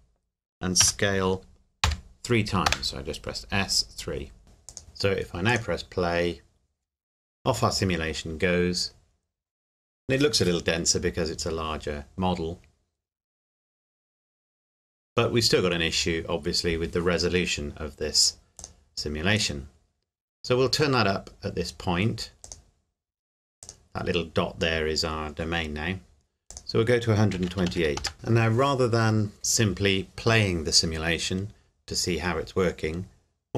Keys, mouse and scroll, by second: 0.8 s, 1.8 KP_3, 2.7 KP_Enter, 4.0 scroll down 1, 4.4 click, 18.6 click, 22.7 click, 26.5 click, 27.4 KP_1, 27.5 KP_2, 27.7 KP_8, 28.0 KP_Enter, 28.1 click.